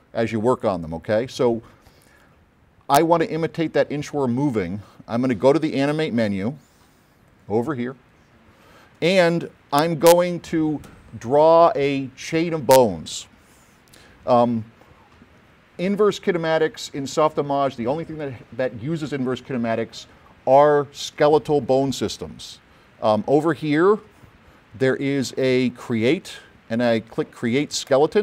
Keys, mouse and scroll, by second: 5.8-7.4 drag, 28.0 click.